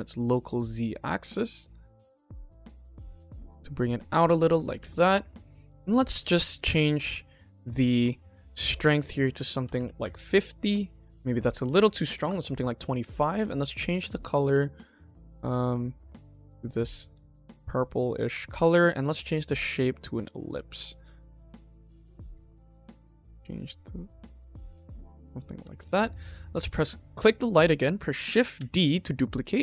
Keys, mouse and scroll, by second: 4.0 click, 4.7 ctrl+s, 5.6 click, 6.6 click, 7.3 middle click, 8.7-9.9 drag, 10.9-12.2 drag, 12.9 click, 19.0-19.9 drag, 20.6 click, 21.0 click, 21.8 click, 25.1 click, 25.5 ctrl+s, 26.3 click, 27.1 click, 28.6 shift+d.